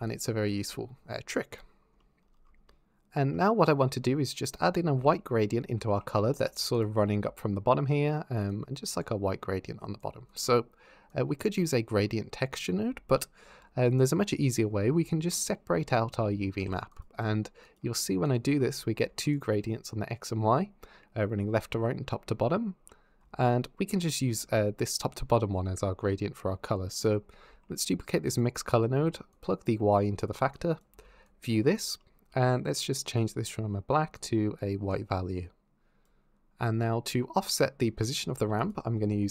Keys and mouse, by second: 4.8-5.8 d, 4.9 click, 6.1 z, 7.0-9.9 d, 8.3 click, 10.1 click, 10.9 click, 15.3 drag, 18.1 ctrl+shift+click, 19.0 ctrl+shift+click, 26.7 click, 27.3 shift+d, 29.1 click, 30.3 click, 31.1 ctrl+shift+click, 32.9 click, 38.3 shift+a.